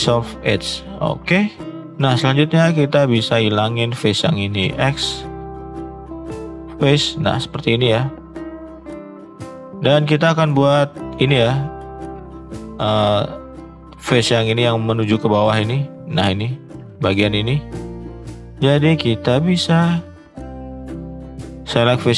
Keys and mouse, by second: 2.2 click, 3.5 shift+click, 4.6 x, 8.6-8.9 middle drag, 9.4 shift+middle drag, 12.3 middle click, 13.0 shift+middle click, 13.3 middle click, 13.7 shift+middle click, 17.5 middle click, 18.2 shift+middle click, 18.6 middle click, 19.0 shift+middle click, 19.3 middle click, 19.8 shift+middle click, 21.8 shift+middle click.